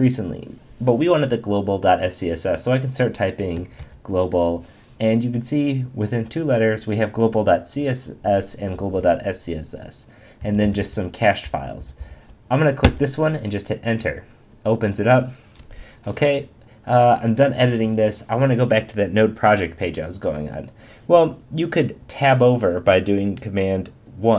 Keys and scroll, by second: 8.8 Down, 11.4 Down, 11.4 Up, 12.8 Return.